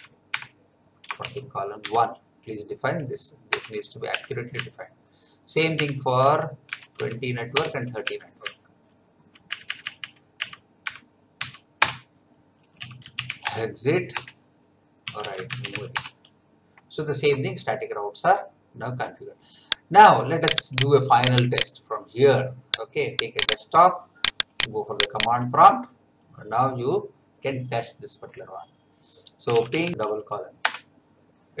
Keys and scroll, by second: 1.2 shift+;, 1.8 1, 3.5 Return, 4.1 Up, 4.5 Left, 5.1 Left, 6.2 Right, 6.7 BackSpace, 7.0 2, 7.5 Return, 8.0 Up, 8.4 Left, 10.8 BackSpace, 11.4 3, 11.8 Return, 12.5-13.8 typing, 14.8-16.2 typing, 29.2-30.4 typing, 30.6 Return.